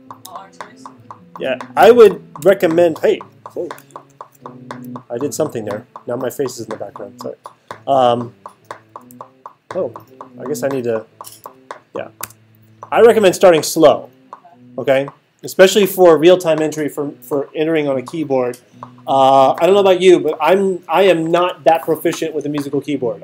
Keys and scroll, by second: 1.8 8, 2.1 0, 2.4 Return, 8.6-9.6 typing, 11.0-11.9 typing, 12.2 Return.